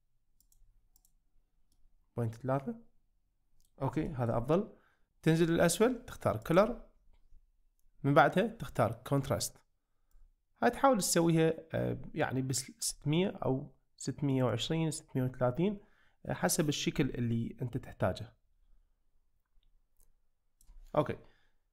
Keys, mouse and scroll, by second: 0.4 click, 1.1 click, 1.8-3.6 middle drag, 4.1 shift+middle click, 6.5-6.8 drag, 10.1-13.0 drag, 14.5 click, 15.6-16.3 middle drag, 17.8-20.9 drag, 21.1-21.7 middle drag.